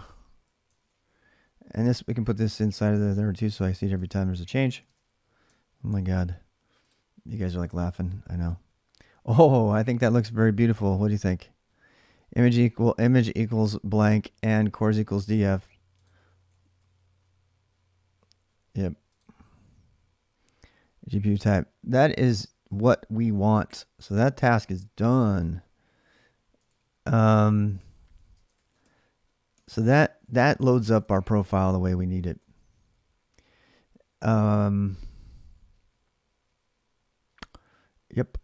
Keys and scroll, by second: 0.6 ctrl+[, 0.7-4.2 typing, 4.6 alt+Tab, 5.7 ctrl+r, 6.8-8.5 typing, 16.0-17.1 typing, 24.4 alt+Tab, 26.2-32.3 typing, 30.4 ctrl+[.